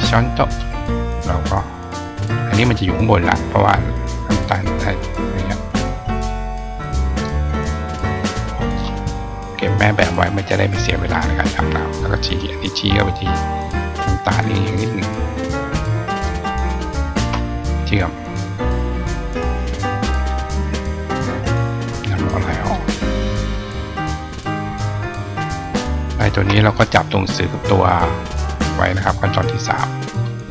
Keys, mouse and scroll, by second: 1.3-6.8 drag, 8.6 click, 8.6 right click, 10.3 click, 10.8-12.3 drag, 14.2 click, 15.4 click, 17.0 shift+click, 20.0 click, 22.5 right click, 26.0 shift+click, 26.8-30.1 drag.